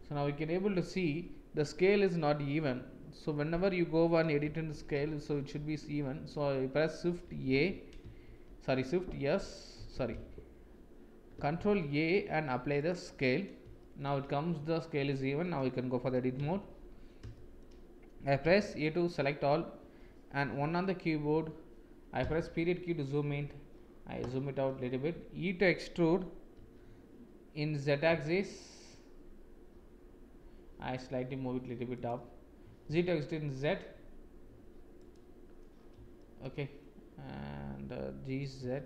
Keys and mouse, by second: 4.9 shift+a, 8.2 shift+s, 11.5 ctrl+a, 13.7 shift+click, 16.3 Tab, 17.3 shift+click, 18.4 a, 20.5 KP_1, 22.1 KP_Decimal, 26.5 e, 32.6 e, 36.1 shift+click, 38.3 g.